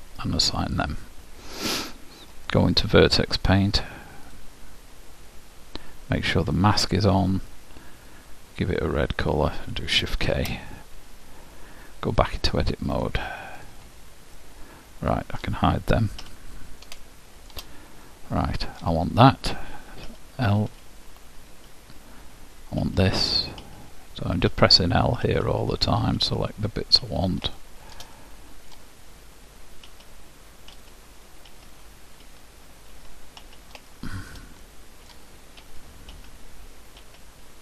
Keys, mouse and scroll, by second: 0.9-2.9 drag, 4.5 click, 6.6-9.5 drag, 10.4 shift+k, 12.5 click, 13.8-14.9 drag, 14.5-16.3 middle drag, 16.4 h, 17.1-19.9 middle drag, 20.3 l, 20.9 l, 21.9-23.9 middle drag, 22.9-27.2 typing, 27.7 middle click, 30.1-33.5 typing, 34.1-36.7 middle drag, 35.8-37.6 typing.